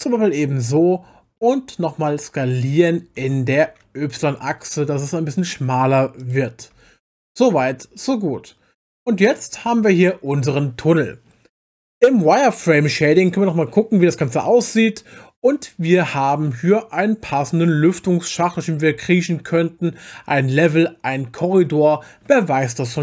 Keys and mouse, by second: 0.2-1.4 middle drag, 3.2 s, 3.6 y, 6.2 click, 6.7 Tab, 7.2-8.4 middle drag, 10.0 click, 13.3 click, 14.4-15.1 middle drag.